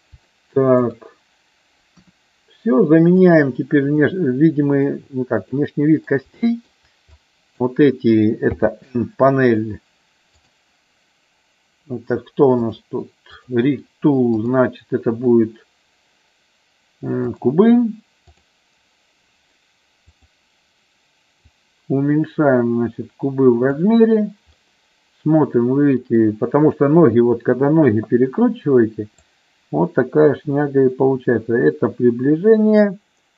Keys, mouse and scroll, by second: 0.3 shift+middle click, 1.9 KP_1, 3.2 click, 5.5 middle click, 6.3 shift+middle click, 7.2 click, 8.5 n, 10.4 click, 12.6 click, 14.3-17.4 drag, 18.3 click, 21.4-23.8 drag, 24.5-26.3 middle drag, 29.2-33.3 drag.